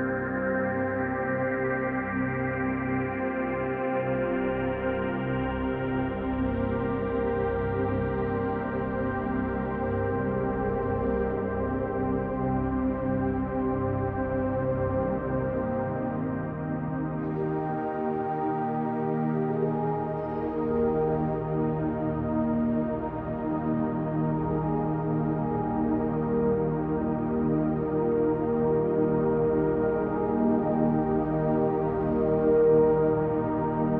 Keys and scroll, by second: 1.5 space, 3.2 space, 3.5 space, 4.9 space, 5.2 space, 6.4-9.2 typing, 10.8 space, 11.0 space, 14.9 space, 15.3 space, 21.9 space, 22.1 space, 23.9 alt+space, 25.9 r, 26.8 ctrl+space, 29.9 p.